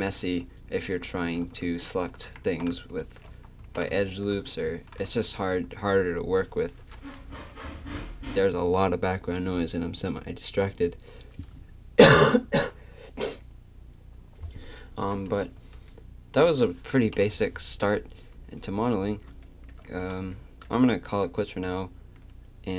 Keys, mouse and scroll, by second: 0.6-7.1 drag, 1.2 a, 2.4 a, 3.6 a, 4.7 a, 7.3 Tab, 15.6 Tab, 17.1 KP_3.